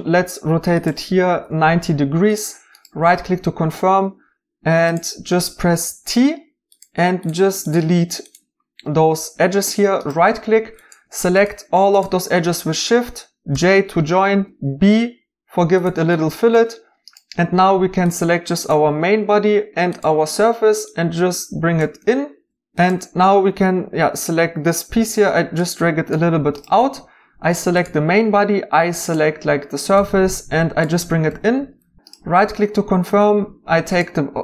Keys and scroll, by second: 1.2 typing, 5.8 t, 13.5-14.3 typing, 22.0-22.5 typing, 22.5 Escape, 24.7-25.5 typing, 31.2-31.8 typing.